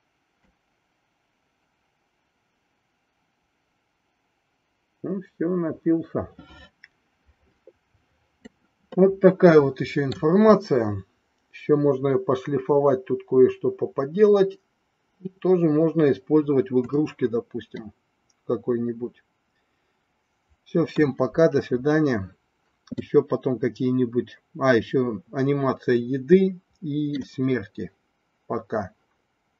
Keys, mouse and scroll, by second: 0.5-8.6 drag, 8.9-10.2 middle drag, 17.8-21.1 middle drag, 23.0-27.2 middle drag.